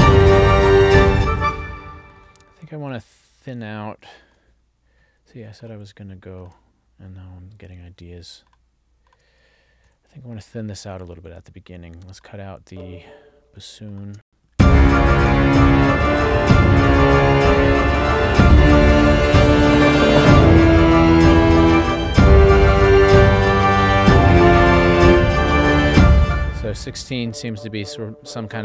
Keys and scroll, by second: 1.2 space, 4.3 ctrl+alt+l, 14.3 space, 26.0 space.